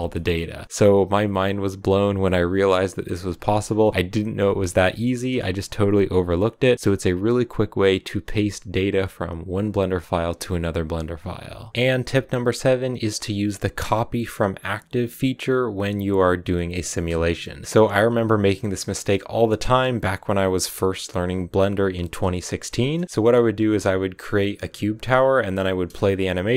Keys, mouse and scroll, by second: 1.3 shift+middle click, 11.5 scroll up 4, 11.7-22.7 middle drag, 22.7-23.0 scroll up 4, 23.0-25.6 middle drag, 25.6-26.5 drag.